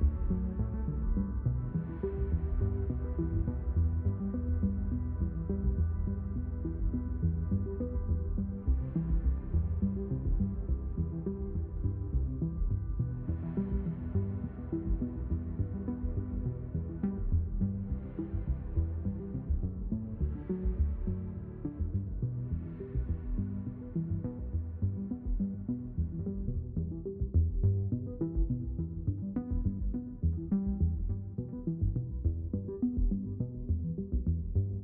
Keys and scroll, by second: 8.2 ctrl+alt+d, 23.5 ctrl+z, 29.6 w, 30.3 a, 31.4-32.3 typing.